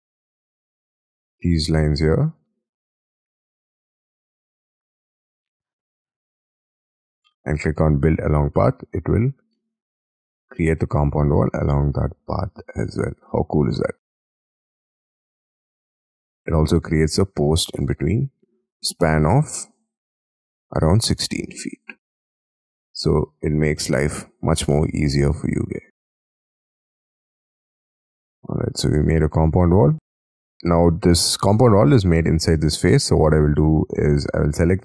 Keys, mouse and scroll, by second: 0.9 ctrl+shift+click, 2.0 ctrl+shift+click, 2.7-3.1 ctrl+shift+scroll down 5, 3.4 scroll down 3, 3.6-4.2 scroll up 13, 4.6 ctrl+shift+click, 5.6-6.5 scroll down 13, 6.5-8.1 scroll up 10, 8.1-8.6 scroll up 2, 9.0-9.6 scroll down 11, 9.6 middle click, 15.6-16.0 scroll down 4, 16.0-17.5 scroll up 20, 17.5 middle click, 18.3-21.5 scroll down 6, 21.5 scroll down 2, 21.7 Escape, 22.0 Escape, 22.1-22.7 scroll down 7, 22.9 scroll up 1, 22.9 middle click, 24.8 shift+middle click, 26.2 middle click, 26.3 shift+middle click, 26.9-27.4 scroll up 11, 27.4 middle click, 27.8 scroll up 6, 28.2 middle click, 28.4 scroll down 6, 30.7-31.6 scroll up 12, 33.1-33.7 scroll down 5, 33.7-34.8 scroll down 7.